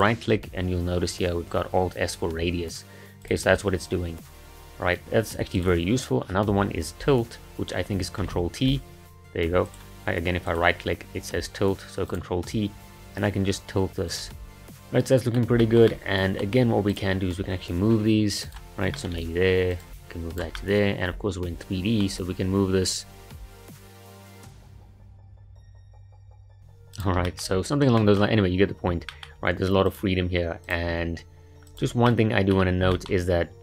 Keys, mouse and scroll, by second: 8.2 ctrl+t, 10.5-14.4 right drag, 14.6-16.9 middle drag, 16.9 click, 17.9 g, 18.9 shift+middle click, 19.7 click, 19.9 g, 20.6-23.3 middle drag, 23.4 click, 23.5-26.1 typing, 23.8 shift+middle click, 23.9 click, 24.7 shift+middle click, 24.8 click, 25.0 shift+middle click, 25.6 click, 26.1 click, 26.3 shift+middle click, 26.9 click, 27.3-29.4 shift+middle drag, 29.4 g, 30.6 click, 30.9 g, 32.1-32.7 middle drag, 32.7 scroll up 1, 32.9-33.6 shift+middle drag.